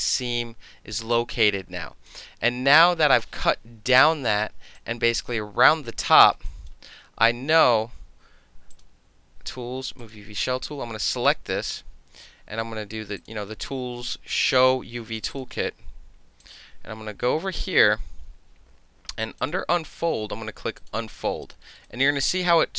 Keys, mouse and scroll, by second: 1.1 alt+click, 4.8 alt+click, 6.0 alt+middle click, 6.5 alt+right click, 8.7 click, 8.8-10.0 middle drag, 10.0 click, 10.1-11.0 middle drag, 11.0 click, 11.1-12.1 middle drag, 13.2 click, 15.3 click, 16.4 click, 19.4 click, 20.8 click, 21.6 alt+middle click, 21.9 alt+right click.